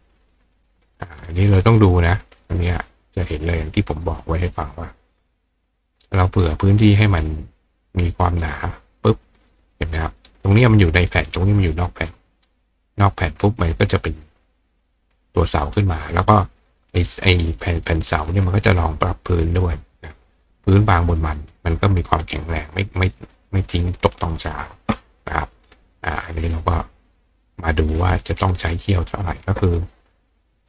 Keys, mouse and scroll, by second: 3.3 click, 4.3 click, 5.9 click, 6.4 click, 8.3 click, 15.1 click, 15.6 right click, 26.4 right click, 27.9 click, 30.3 click.